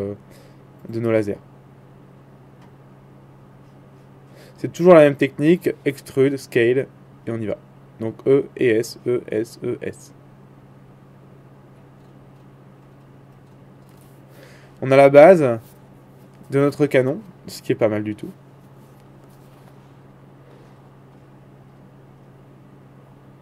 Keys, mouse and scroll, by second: 0.0 e, 1.5 e, 2.6 e, 6.1 e, 9.1 middle click, 13.1 middle click, 13.8 Tab, 14.3-15.6 middle drag, 15.6-23.4 drag, 21.4-23.4 middle drag, 22.3 Tab.